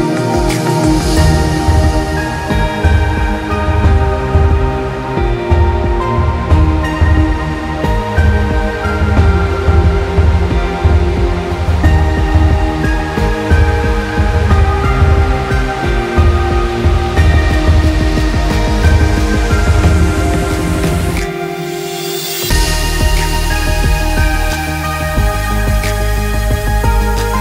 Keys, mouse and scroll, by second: 18.2 click, 18.8 click, 20.1 [, 20.1 click, 20.4 alt+scroll down 1, 21.2-21.6 alt+scroll up 2, 21.7 click, 22.2 Delete, 22.7 z, 22.8 click, 23.2 Delete, 23.7 Delete, 24.1-24.7 scroll down 3, 24.7 click, 24.8 space, 25.0 scroll up 1, 25.6 click, 26.6 alt+scroll down 1, 26.7 alt+scroll up 2, 27.3 click.